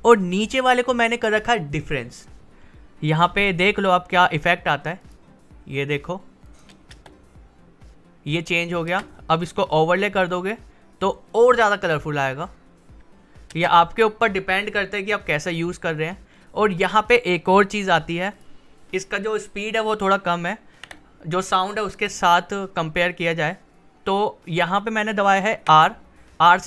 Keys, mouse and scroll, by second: 5.7 click, 6.9 space, 8.9 space, 9.3 click, 11.7 space, 16.8 click, 20.8 r, 24.4 click, 25.6 r, 26.5-26.6 drag.